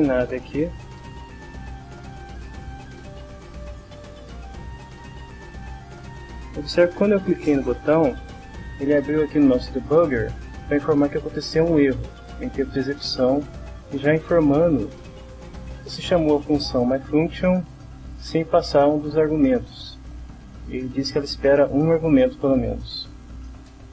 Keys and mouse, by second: 0.0 Left, 2.6 click, 4.4 click, 5.1 click.